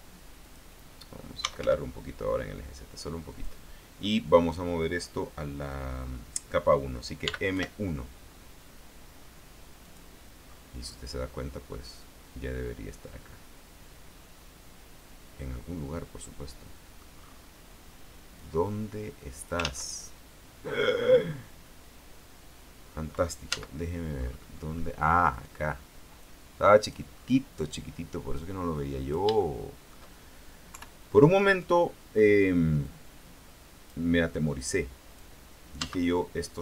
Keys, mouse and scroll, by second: 0.6 click, 1.3-2.2 typing, 3.5 click, 7.4 m, 7.7 KP_1, 10.0 click, 10.6-11.9 scroll down 1, 11.9-17.3 middle drag, 17.3-17.8 scroll up 1, 18.5-19.9 drag, 19.8 ctrl+z, 20.6 scroll down 2, 23.7 z, 24.3-25.2 scroll up 2, 25.5 right click, 26.4 click, 27.3-28.5 scroll down 2, 28.5-29.5 drag, 29.5 shift+middle click, 30.9 KP_3, 33.0-34.3 drag, 34.7 click, 36.0 z.